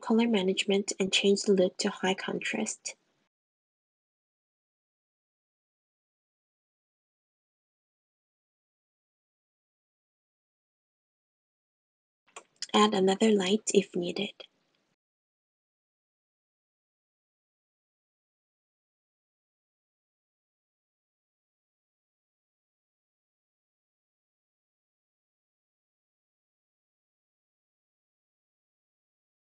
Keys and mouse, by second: 1.2 middle click, 2.8 middle click, 4.7-6.1 middle drag, 7.4 middle click, 10.6 middle click, 13.0 middle click, 13.0 middle click, 14.2 shift+d, 14.5 g, 15.8 r, 17.5 g, 19.6 middle click, 20.1-21.6 middle drag, 22.0-23.5 middle drag, 23.9-25.2 middle drag, 28.9 `, 28.9 r.